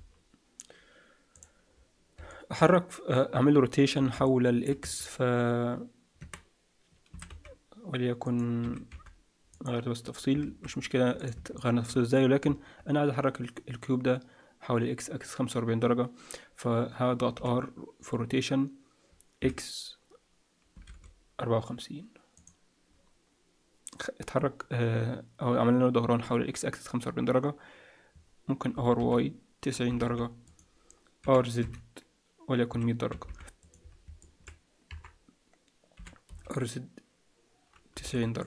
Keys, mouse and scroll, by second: 0.7-1.3 scroll down 1, 1.3 click, 1.3-2.2 scroll down 4, 2.2 middle click, 4.2 middle click, 4.9 Tab, 6.2 Tab, 7.1 s, 8.6 s, 10.2 scroll down 1, 10.4 alt+a, 10.8-11.2 scroll up 1, 11.2 click, 11.5 shift+middle click, 17.3 r, 26.9-28.6 scroll down 1, 28.6 scroll down 1, 28.7 r, 31.2 r, 34.2 middle click, 34.8 KP_7, 35.9 r.